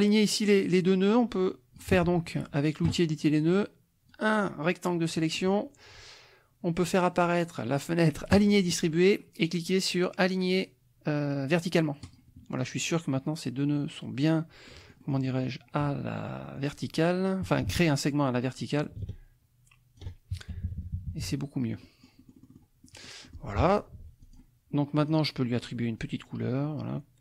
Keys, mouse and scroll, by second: 4.1-5.3 drag, 8.3 click, 12.0 click, 14.6-15.6 drag, 16.4 click, 19.0-20.2 ctrl+drag, 20.5 ctrl+KP_Subtract, 21.8 click, 22.8 click, 23.9 F1, 24.2 click, 25.0 click.